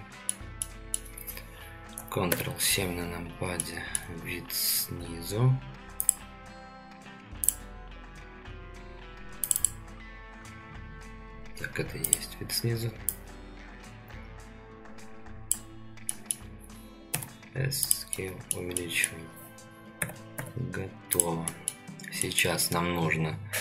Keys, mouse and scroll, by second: 0.6 middle click, 2.3 ctrl+KP_7, 3.6-4.0 shift+middle drag, 16.1 middle click, 17.1 s, 18.1-18.5 middle drag, 18.7 middle drag, 20.0 g, 21.4 middle drag, 22.2 middle click.